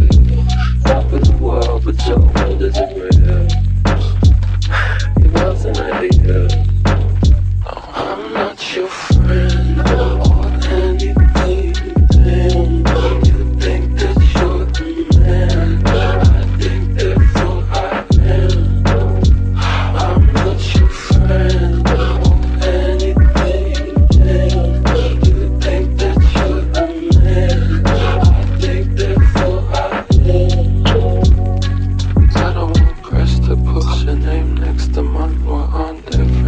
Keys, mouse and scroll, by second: 7.1 p, 30.6 F9, 32.5 F9.